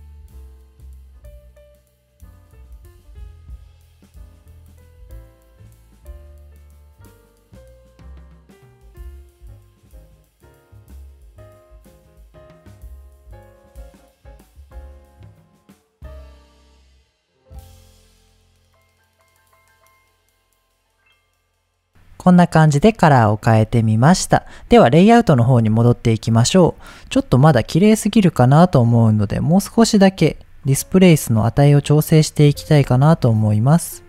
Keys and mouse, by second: 1.8-3.2 drag, 3.2 middle click, 3.5 middle click, 4.4-8.0 drag, 8.0 middle click, 9.4 click, 9.8 click, 10.1 middle click, 10.6-12.3 drag, 12.3 middle drag, 12.7-14.0 middle drag, 14.4-14.7 middle drag, 14.7-15.7 drag, 16.0 middle click, 16.8-17.8 drag, 18.1 ctrl+z, 18.4 click, 19.4 click, 19.6-20.2 middle drag, 20.7-21.9 middle drag, 22.8 middle click, 26.5-26.8 middle drag, 27.2 click, 27.6 middle click, 28.5 click, 30.6-32.5 shift+drag, 33.3-34.0 shift+drag.